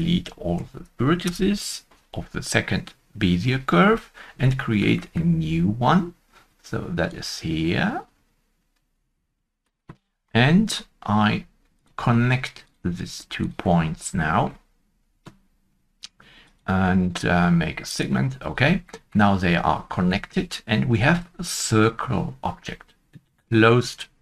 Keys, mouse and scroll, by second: 0.0 Return, 0.0 Tab, 0.5 Delete, 0.5 a, 4.5 Tab, 4.5 Delete, 4.5 Return, 4.5 a, 4.9 middle click, 4.9 shift+middle click, 10.1 Delete, 10.1 Return, 10.1 shift+middle click, 10.1 a, 10.3-10.6 scroll up 1, 13.4 scroll up 1, 13.4 shift+click, 14.1 shift+click, 18.8 shift+middle click, 18.8 shift+click, 18.8 scroll up 1, 18.8 shift+middle click, 20.1 shift+middle click, 20.8 shift+middle click, 20.9 Tab.